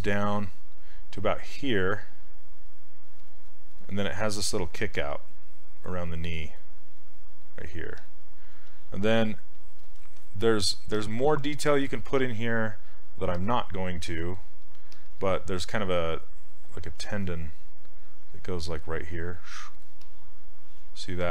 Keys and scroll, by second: 4.4 s, 14.1 s, 16.9 s.